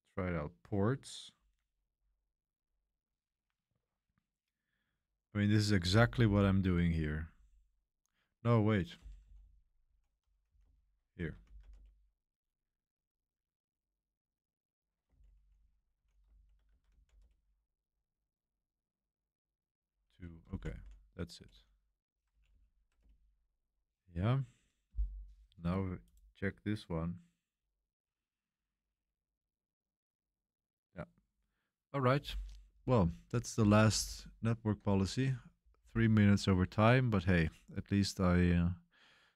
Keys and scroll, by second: 1.1-2.4 typing, 5.6-7.3 typing, 8.7-13.2 typing, 11.1 Escape, 14.8-17.7 typing, 19.4-21.2 typing, 21.3 Return, 22.3 Page_Up, 22.5 Page_Up, 23.0 Return, 34.0 super+3, 36.5 super+1.